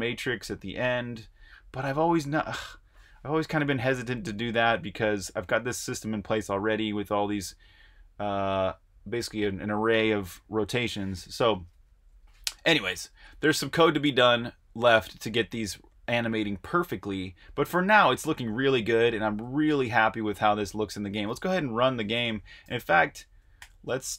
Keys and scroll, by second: 12.1 Escape, 13.0 super+Tab, 19.7 super+Tab, 22.6-24.1 typing.